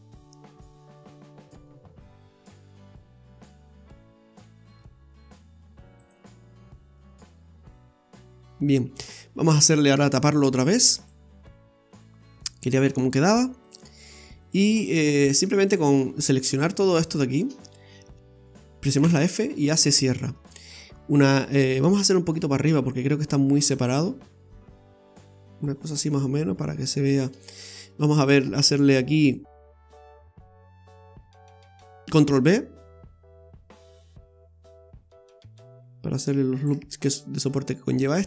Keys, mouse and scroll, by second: 0.8-1.4 scroll up 6, 1.6 middle click, 6.0 click, 6.9 middle click, 9.2-9.6 scroll down 2, 9.9 Tab, 10.3 scroll down 1, 10.9 right click, 11.2 Tab, 11.8 scroll up 2, 13.6 click, 14.4 right click, 15.6 click, 16.5 right click, 16.8 alt+shift+right click, 17.0 right click, 19.0 f, 19.8 middle click, 22.0 middle click, 23.7 click, 27.7 middle click, 29.3 right click, 29.9 alt+shift+right click, 30.1 right click, 32.0 ctrl+b, 36.9 scroll down 2, 37.2 middle click, 37.9-38.2 scroll up 2.